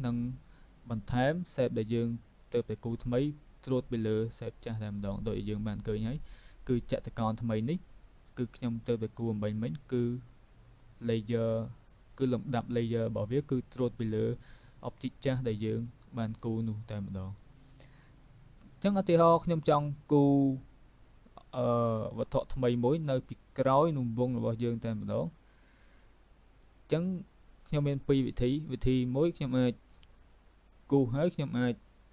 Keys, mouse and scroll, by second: 1.4 click, 2.5 click, 3.1 click, 4.6 click, 6.2 click, 6.9 click, 8.6 click, 9.7 click, 13.0 click, 14.0 click, 14.7 click, 24.3 click, 25.1 click, 25.9 click, 29.9 click, 31.1 click.